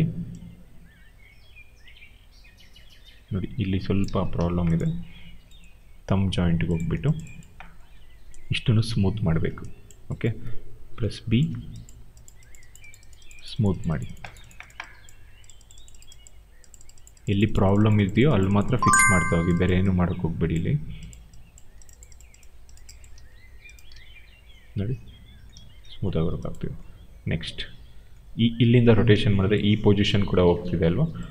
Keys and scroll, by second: 3.9 ctrl+z, 4.2 q, 10.9 b, 23.0 w, 25.5 ctrl+z, 28.7 ctrl+z, 29.0 q.